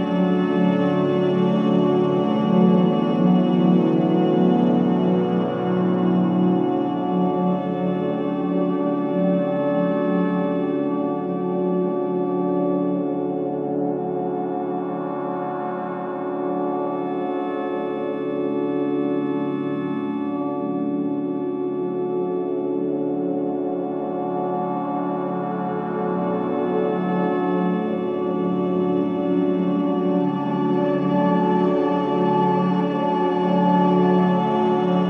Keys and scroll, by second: 13.6 ctrl+shift+KP_0, 16.2 Up, 16.3 Up, 16.4 Up, 16.6 Up, 16.8 Up, 21.4 v, 23.3 space, 23.9 v, 25.0 shift+x, 25.8 space, 28.7 space, 31.5 space, 32.6 v, 34.0 space.